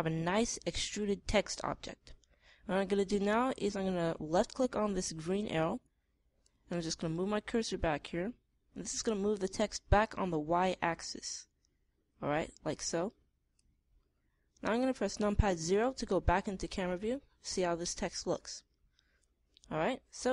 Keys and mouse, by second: 17.2 KP_0, 18.7-20.3 middle drag.